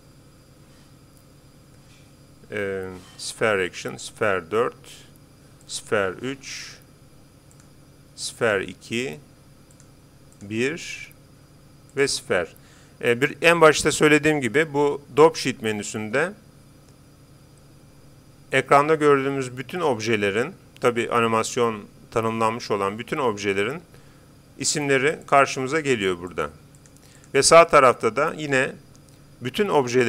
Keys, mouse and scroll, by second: 3.7-5.4 drag, 5.6-7.3 drag, 7.6-13.6 drag, 25.2-28.8 drag.